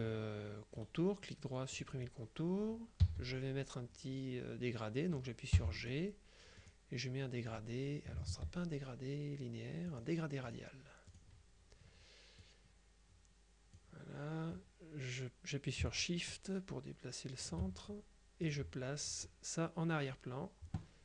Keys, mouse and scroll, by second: 0.9 right click, 1.8 click, 3.1 g, 5.7 g, 5.9 click, 6.7 click, 8.4 ctrl+z, 10.0 click, 11.2 click, 12.5-14.3 drag, 15.9-18.0 shift+drag, 18.5 click.